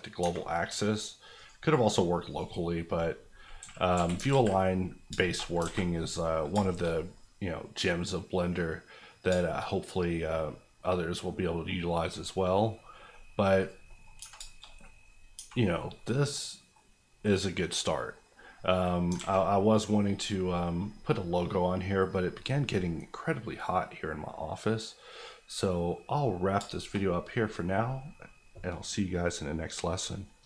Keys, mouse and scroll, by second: 0.2 Tab, 1.3 click, 3.6 KP_4, 3.9 KP_1, 4.3 alt+z, 4.8-5.6 scroll down 3, 5.2 shift+middle click, 5.6 a, 5.9 middle click, 6.5 shift+middle click, 6.7 shift+middle click, 6.7-7.1 shift+scroll down 2, 7.1-9.0 middle drag, 9.0 scroll down 1, 9.2 scroll up 2, 9.4 shift+middle click, 9.7 scroll down 1, 9.9 middle click, 11.8-12.2 scroll up 1, 12.2 middle click, 13.6 click, 13.8 middle click, 14.1 scroll up 1, 14.2 Tab, 14.4 shift+middle click, 14.6-15.3 shift+scroll up 3, 15.3 Tab, 15.6 scroll down 1, 15.9 middle click, 16.7 scroll up 1, 17.7 scroll down 1, 18.5 middle click, 18.8-21.6 scroll down 2, 19.1 alt+a, 21.6 middle click, 22.2-25.8 middle drag, 25.8-26.2 scroll up 1, 26.2 middle click, 26.5 shift+middle click, 27.0 middle click.